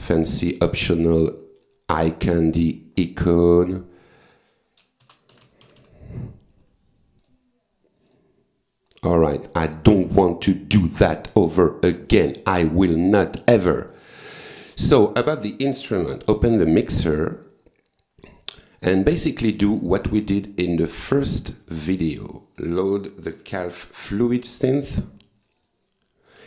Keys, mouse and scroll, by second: 0.3 click, 1.3 click, 2.2 click, 3.4 click, 4.8-6.3 typing, 7.2 click, 8.1 click, 8.9 click, 9.8 click, 11.2 click, 11.6 click, 12.1 click, 12.5 click, 13.0 click, 14.0 click, 14.6 click, 16.2 F9, 17.4-18.7 drag, 19.6 click, 20.0 right click, 20.7 click, 22.0 click, 23.1-24.4 typing, 25.5 click.